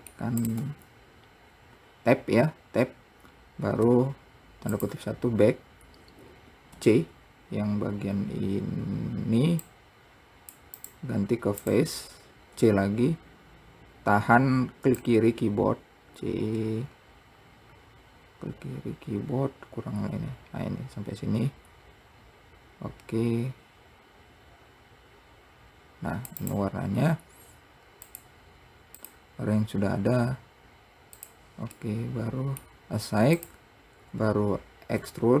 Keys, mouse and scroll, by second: 0.7 click, 5.7-6.6 scroll up 4, 6.6-7.0 scroll down 1, 7.0 c, 11.9 click, 12.8 c, 28.3 click, 31.6 click, 32.1-33.7 middle drag, 33.7-35.3 drag, 35.3 e.